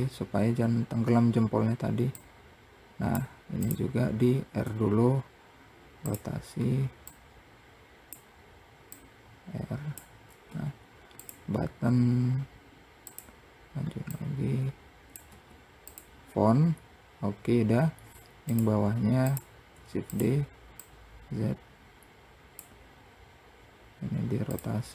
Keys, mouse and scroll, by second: 1.6 click, 3.0 click, 4.1 r, 6.5 click, 8.3 click, 9.8 `, 11.2 r, 13.5 click, 17.2-17.8 scroll down 1, 17.8 click, 18.7 shift+click, 19.1 shift+d, 20.2 click, 22.8-23.5 scroll up 1, 23.9 click.